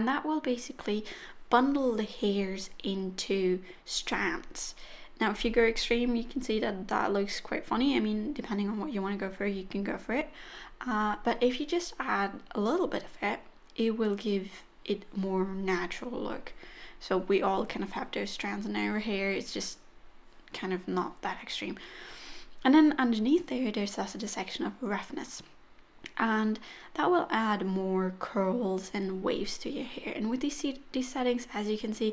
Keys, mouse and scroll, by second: 1.3 click, 4.0 middle click, 6.2 middle click, 9.1 click, 14.8 middle click, 21.6 click, 22.1-22.7 scroll down 1, 22.7-24.7 scroll down 1, 25.2-26.2 scroll down 1, 26.2 click.